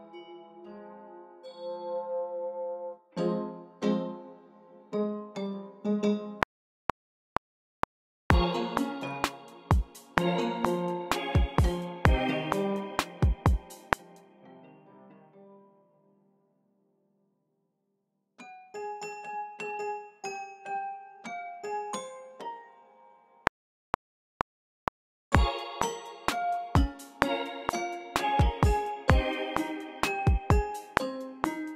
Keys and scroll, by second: 6.4 r, 13.7 space, 14.0 super+z, 23.4 r.